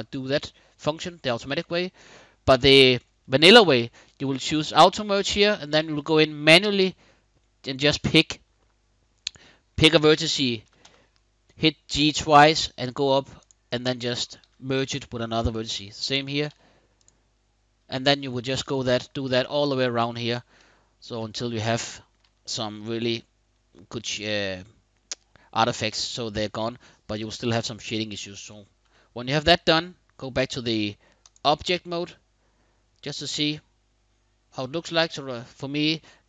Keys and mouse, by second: 2.3 click, 5.2 shift+click, 10.4 g, 10.6 g, 13.1 click, 14.2 g, 14.6 click, 15.8 click, 16.0 g, 16.2 g, 16.7 click, 18.6 shift+click, 20.3 shift+click, 21.5 shift+click, 28.6 Tab, 31.7-36.2 middle drag.